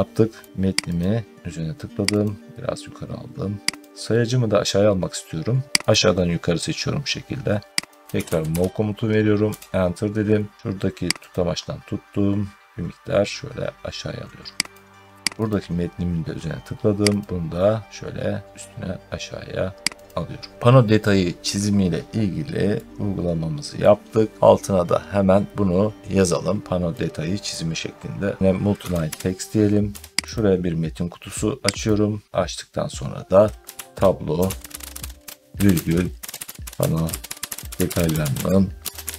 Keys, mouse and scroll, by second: 0.2 middle click, 0.4 scroll down 1, 0.5-0.8 scroll, 1.4-2.0 scroll up 1, 3.6 click, 3.9 middle click, 4.3 middle click, 5.6 Escape, 5.8 click, 7.8 click, 7.9-9.3 typing, 11.2 click, 14.6 click, 15.4 click, 17.1 click, 19.9 click, 20.5 middle click, 20.5-22.1 scroll down 1, 23.6 middle click, 27.4 middle click, 28.4 middle click, 28.5-39.1 typing, 29.8 Return, 30.2 click, 31.7 click.